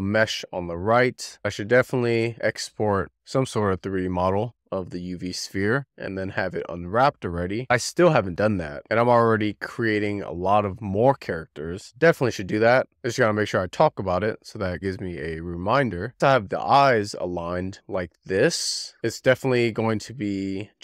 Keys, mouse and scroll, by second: 0.2 w, 0.6 click, 1.8 click, 2.1 click, 2.2 a, 2.4 e, 2.5 click, 2.9 w, 3.4 a, 3.7 click, 4.3 middle click, 4.5-5.2 scroll down 9, 4.7 shift+middle click, 4.9 a, 5.2 shift+middle click, 5.7 click, 5.9 scroll down 1, 6.1 click, 6.4 click, 7.1 drag, 7.5 scroll up 3, 8.0 click, 8.4 a, 8.5 click, 8.7 click, 9.0-9.3 scroll down 2, 9.3 click, 10.1 click, 13.9-14.2 scroll down 3, 14.2-15.7 shift+middle drag, 16.2 click, 16.4 right click, 16.5-16.9 scroll down 4, 17.3 click, 18.0 BackSpace, 18.9 r.